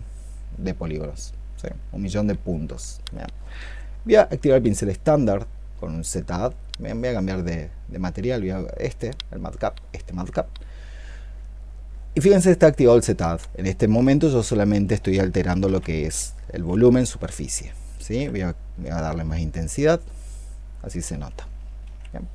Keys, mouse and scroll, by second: 1.5 double click, 15.5 ctrl+z, 15.8-17.2 typing, 17.9 ctrl+z, 21.7 ctrl+z.